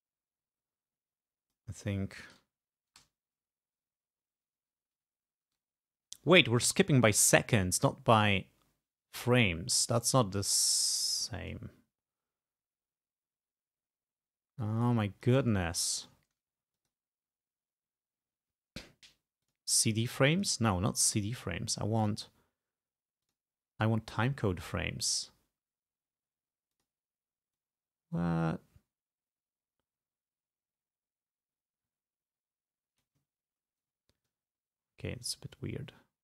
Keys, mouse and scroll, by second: 2.5 Left, 3.1 Right, 3.8 Left, 4.3 Right, 4.7 Left, 10.4 ctrl+scroll up 2, 10.9 ctrl+scroll down 2, 11.6-15.6 ctrl+drag, 15.7 ctrl+scroll up 2, 16.9 click, 19.5 click, 20.4 click, 23.3 click, 26.8 click, 27.6-33.3 drag, 33.4-34.0 ctrl+scroll down 4, 34.4-36.2 ctrl+drag.